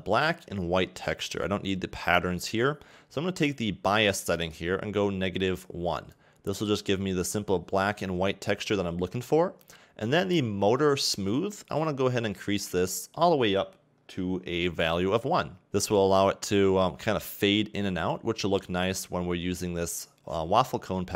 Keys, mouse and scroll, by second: 4.9 click, 11.9 click, 16.4-17.3 scroll up 4, 18.3-19.8 scroll down 3, 19.8-20.8 scroll down 2.